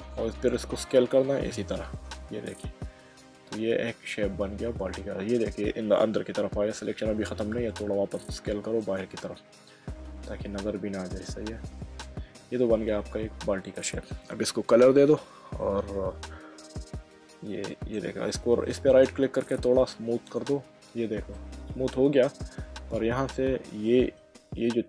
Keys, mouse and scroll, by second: 0.9 s, 1.9 click, 2.5 middle click, 7.6 s, 8.8 click, 9.3 middle click, 12.5 middle click, 17.0 Tab, 17.7 middle click, 18.9 click, 19.6 right click, 20.3 click, 21.5 middle click.